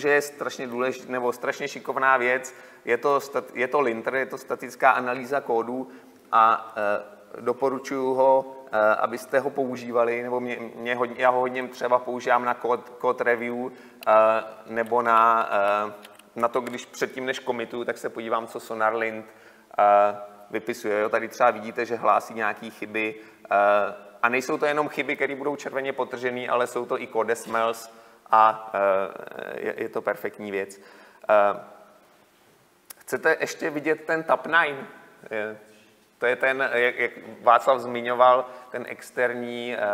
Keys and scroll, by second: 9.5 ctrl+shift+s, 16.1 Delete.